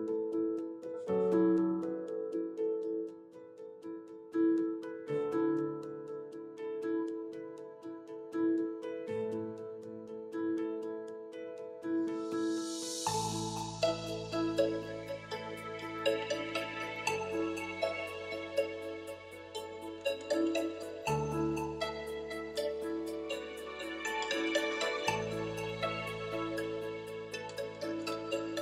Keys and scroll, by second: 1.5 e, 11.3 space.